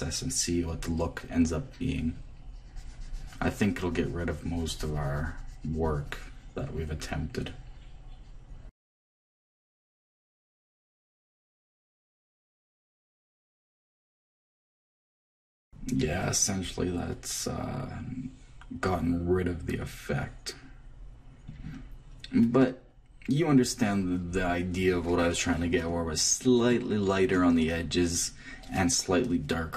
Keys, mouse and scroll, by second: 10.9 click, 12.4 click, 13.3 click, 14.6 click, 15.5 click, 15.7-16.9 middle drag, 22.4-24.6 middle drag.